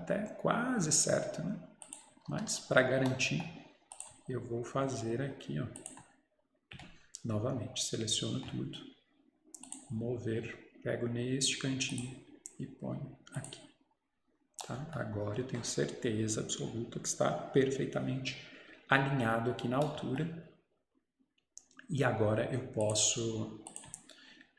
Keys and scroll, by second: 2.3 Escape.